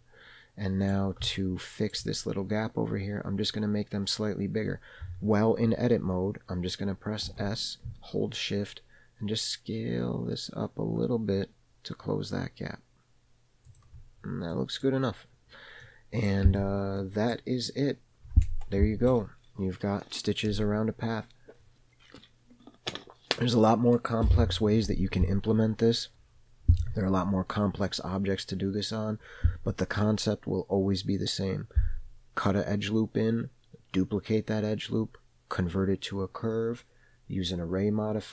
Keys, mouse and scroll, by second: 1.3-2.0 shift+scroll up 2, 1.4 shift+middle click, 2.3 scroll up 1, 7.3 s, 14.6 middle click, 15.1-15.9 scroll down 2, 15.9 middle click, 16.6 Tab, 17.0-17.4 middle drag, 17.5-20.7 scroll down 2.